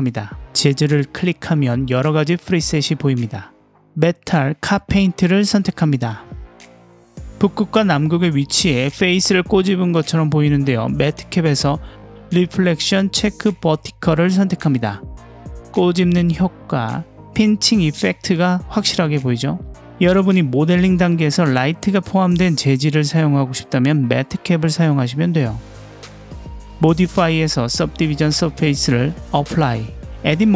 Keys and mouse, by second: 5.8-8.1 middle drag, 9.3-10.9 middle drag, 12.2-14.8 drag, 15.9-17.2 middle drag, 17.6-19.1 middle drag, 21.3-23.5 drag, 24.8 ctrl+z, 28.3-30.5 drag.